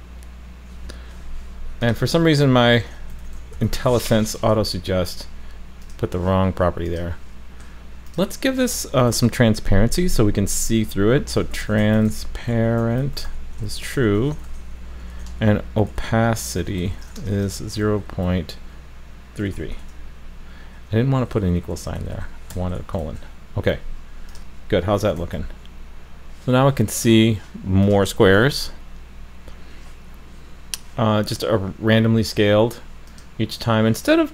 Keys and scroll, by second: 4.4 super+s, 25.2 super+s, 28.1 super+s.